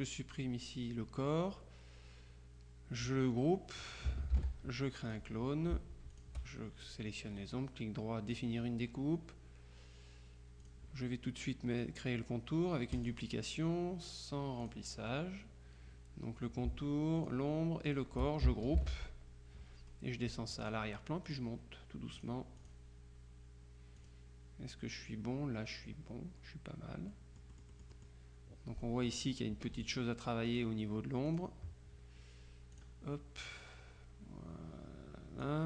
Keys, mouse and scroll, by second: 4.4 ctrl+g, 5.1 click, 6.2 shift+click, 7.4 right click, 8.4 click, 10.7 click, 13.0 click, 14.7 click, 17.3 shift+click, 18.0 click, 18.9 ctrl+g, 20.7-21.9 drag, 22.3-23.3 drag, 24.1 click, 27.2-29.6 drag, 29.6 F2, 29.9 click, 30.6 click, 31.4 click, 32.8 click, 33.7-35.6 drag.